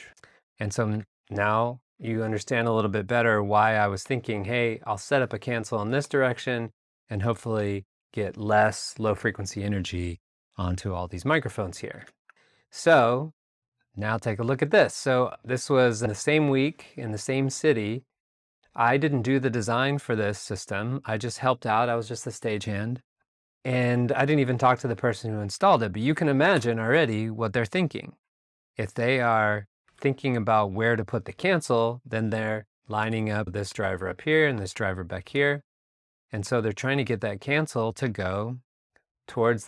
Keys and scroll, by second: 0.9 alt+Tab, 1.9 alt+a, 6.9 r, 7.2 r, 12.2 alt+Tab, 12.2 alt+Right, 26.5 alt+BackSpace, 29.8 a, 33.0 r, 35.3 a.